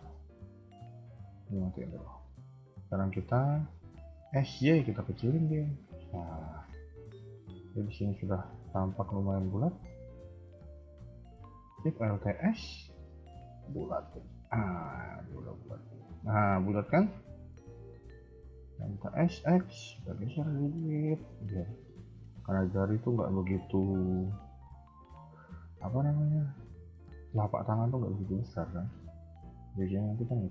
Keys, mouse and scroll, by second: 0.0 middle click, 1.5 click, 1.8 middle click, 3.2 KP_3, 4.2 s, 6.7 middle click, 7.9 KP_1, 8.4 middle click, 9.7 middle click, 12.3 alt+shift+s, 14.6 middle click, 16.4 KP_1, 16.5 KP_3, 17.0 KP_1, 18.9 s, 22.1 middle click, 23.2 KP_1, 29.0 shift+middle click.